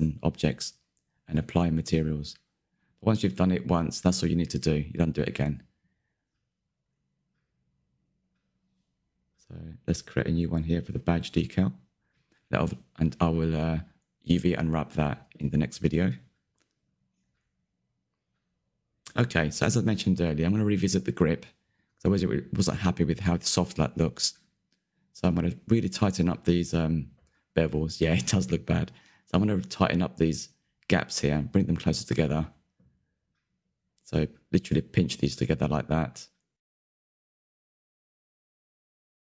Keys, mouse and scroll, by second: 0.5 c, 3.7 middle click, 3.9 scroll down 1, 4.1 middle click, 4.3-5.4 scroll up 4, 5.6 click, 6.3 click, 6.6 shift+middle click, 7.3 ctrl+KP_Add, 7.9-10.8 drag, 11.1 click, 11.4-11.8 scroll down 2, 11.8 Tab, 12.4 scroll down 1, 12.6 click, 12.7-14.0 middle drag, 14.0 scroll down 1, 14.1 shift+middle drag, 14.3-14.6 scroll up 7, 14.6-16.7 middle drag, 16.7-17.8 scroll down 8, 17.0 shift+middle click, 17.5 middle click, 17.8-20.2 shift+middle drag, 20.2 /, 22.3 click, 23.3 click, 23.6-24.4 middle drag, 24.4 scroll up 5, 24.9-28.2 shift+middle drag, 28.2 click, 30.0 Tab, 30.4-32.1 middle drag, 32.4 2, 32.5 alt+click, 33.5 middle click, 34.6 click, 34.8 middle click, 35.2 s, 37.5 shift+middle click, 37.7 KP_3, 37.9 scroll up 3, 39.1 alt+click.